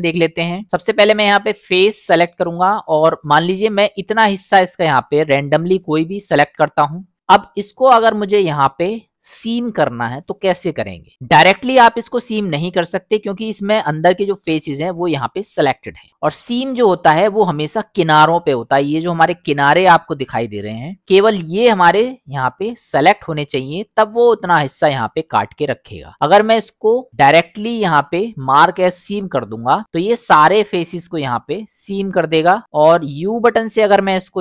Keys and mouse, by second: 1.1 click, 2.0-2.5 middle drag, 3.5-4.9 drag, 5.7-7.1 middle drag, 7.6 middle click, 10.1 middle click, 12.0 middle click, 16.1 middle click, 22.6 middle click, 24.4 middle click, 27.1 u, 30.1 middle click, 33.5 u.